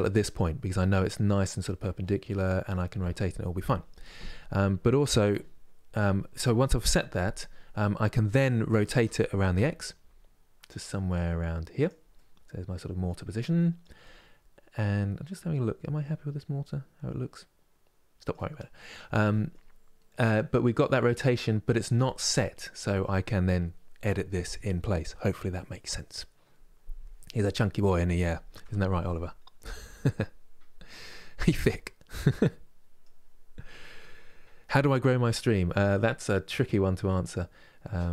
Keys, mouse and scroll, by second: 0.3-3.3 middle drag, 4.2-7.2 middle drag, 7.5-8.6 middle drag, 8.6 r, 11.8-16.7 middle drag, 18.2-25.2 middle drag, 26.9-30.0 middle drag, 31.5-38.1 middle drag.